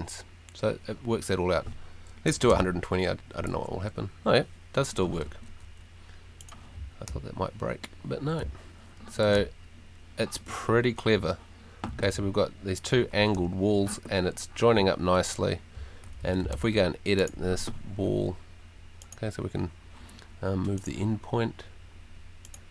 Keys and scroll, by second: 2.2-3.0 typing, 3.5 Return, 6.7 a, 7.1 w, 8.4 s, 9.3 w, 11.1 w, 12.1 s, 13.3 w, 14.1 s, 15.7 d, 16.5 w.